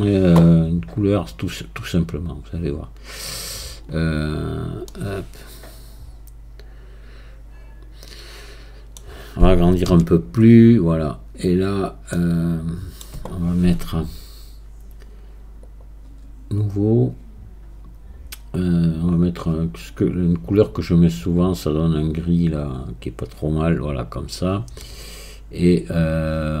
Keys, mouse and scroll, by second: 1.0 scroll up 1, 4.3-4.9 scroll down 2, 4.9-7.9 middle drag, 11.2-12.1 scroll down 1, 12.1-15.2 middle drag, 18.3-19.1 scroll down 1, 19.1-22.6 drag, 25.5-26.6 scroll down 4.